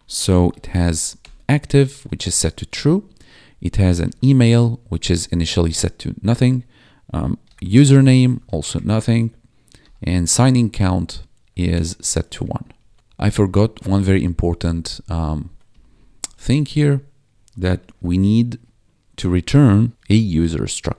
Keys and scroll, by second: 0.0-5.1 typing, 6.0 Escape, 7.1-11.9 typing, 10.4 Tab, 12.7 ctrl+s, 13.2 Up, 14.3 ctrl+Right, 15.6 Left, 16.1 Right, 17.2 space, 17.5 -, 17.9 shift+., 18.5 space, 19.9 e, 20.3 ctrl+s.